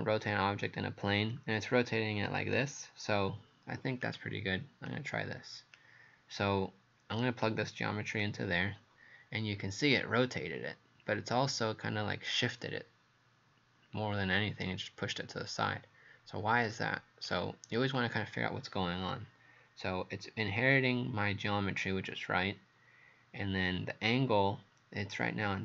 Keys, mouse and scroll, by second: 4.0 click, 9.9 right click.